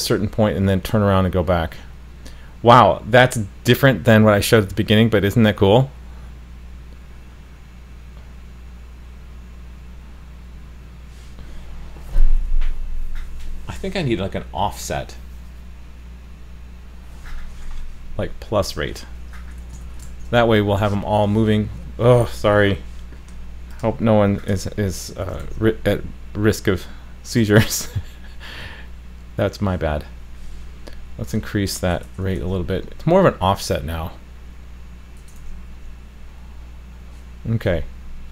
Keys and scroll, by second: 20.1 super+s, 25.4 super+s, 32.4 super+s, 35.4 super+s.